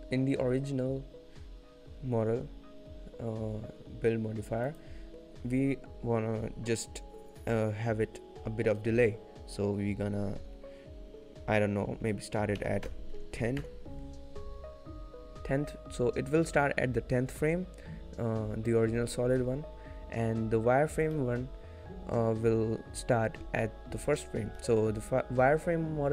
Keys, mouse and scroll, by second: 4.8 click, 21.4 shift+middle click, 24.9 shift+middle click.